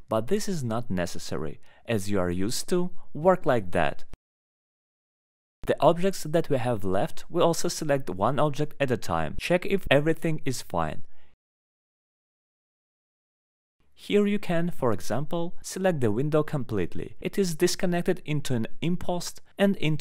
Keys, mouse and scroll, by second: 0.2 scroll, 0.5 alt+middle click, 2.5 alt+middle click, 3.0 click, 3.6 ctrl+click, 5.5 middle click, 6.0 alt+middle click, 6.8 click, 8.7 click, 9.2 alt+middle click, 9.9 ctrl+click, 10.8 ctrl+click, 11.5 alt+middle click, 12.3 alt+middle click, 14.7 click, 15.7 middle click, 16.2 middle click, 16.7 scroll down 1, 17.4 middle click, 17.4 scroll down 1, 17.4 middle click, 17.5 middle click, 18.3 scroll, 18.9 alt+middle click, 19.6 scroll.